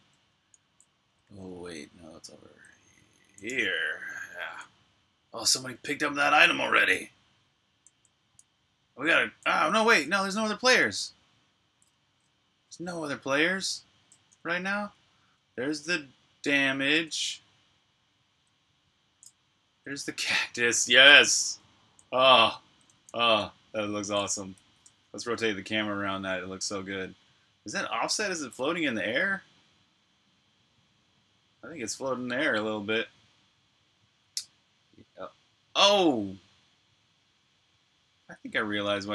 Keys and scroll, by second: 0.0-3.8 typing, 5.1-9.1 typing, 10.3-18.8 typing, 22.5-23.2 typing, 28.9 c, 32.2 c, 38.1 c.